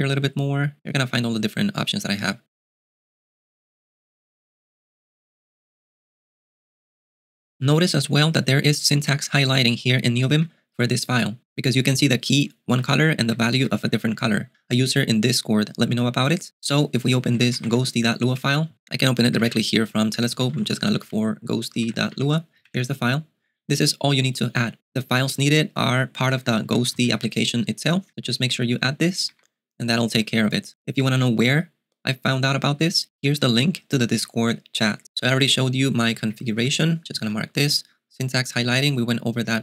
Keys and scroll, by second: 0.8 ctrl+d, 9.8-10.4 typing, 12.2-15.0 typing, 17.4-17.7 typing, 19.4-22.7 typing, 26.2-29.9 typing, 32.6-33.3 typing, 36.2-36.6 typing, 37.2 alt+x, 38.7 alt+x.